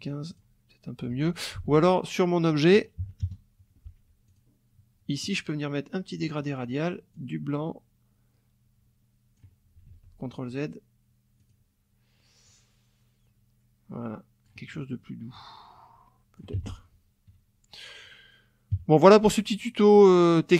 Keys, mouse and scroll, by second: 0.3 click, 1.6 ctrl+z, 3.0 KP_Subtract, 3.2 KP_Add, 4.3 click, 6.2 click, 7.1-9.6 drag, 9.8 ctrl+z, 11.4 click, 12.5-14.6 drag, 15.3-16.5 drag, 16.5 F1, 16.7 click, 18.7 KP_Subtract, 19.5 click.